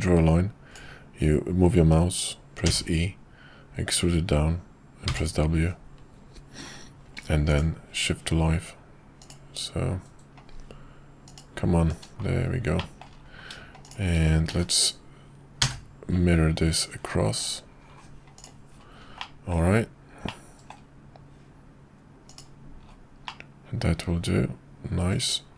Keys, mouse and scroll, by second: 12.8 middle drag, 14.5 alt+x, 18.3 click, 19.2-19.6 middle drag, 20.2-20.6 middle drag, 22.3 click, 23.2-25.5 middle drag.